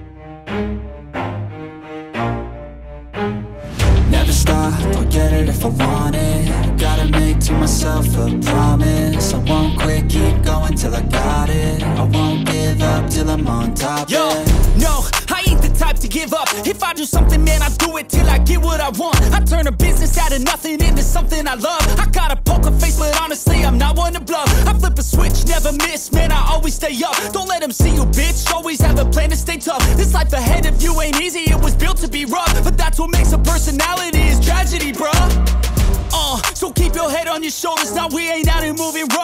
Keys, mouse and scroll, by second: 0.0 right click, 4.2 right click, 21.0 double click, 27.3 double click, 32.0 ctrl+z, 32.2 right click, 35.0 double click, 35.9 double click, 37.0 right click.